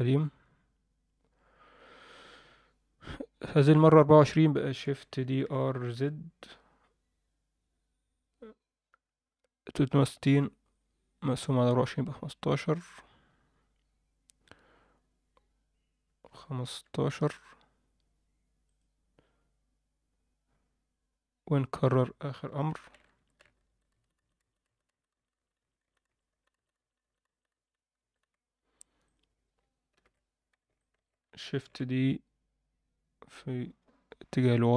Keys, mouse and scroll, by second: 5.2 shift+d, 21.8 click, 22.7 shift+r, 22.9 shift+r, 23.1-28.3 shift+r, 29.0 click, 29.9 ctrl+l, 30.7 alt+shift+middle click, 31.6 shift+d.